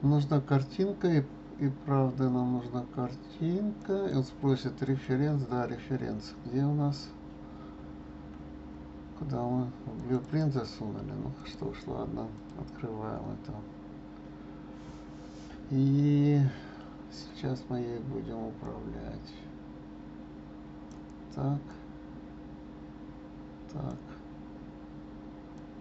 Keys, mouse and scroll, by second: 13.4-15.9 scroll down 2, 15.9-16.2 scroll down 4, 18.6 click, 21.7 click, 25.5 click.